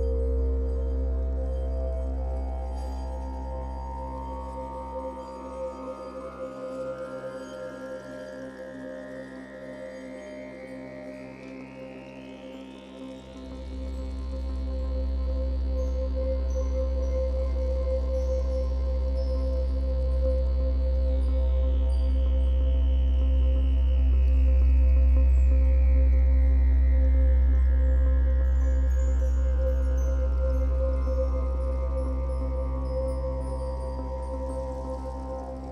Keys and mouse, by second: 0.4 shift+click, 2.4-3.4 drag, 3.4 Delete, 5.1-11.2 ctrl+alt+drag, 11.6 click, 12.3 shift+click, 13.4 g, 13.7 y, 14.4 click, 14.9 click, 16.2 g, 16.4 y, 16.9 click, 18.5-23.0 alt+drag, 23.4-25.5 drag, 26.1-27.6 ctrl+alt+drag, 28.0-28.3 typing, 29.8-32.2 shift+drag, 32.2 g, 32.5 y, 33.2-35.7 shift+drag, 35.5 typing.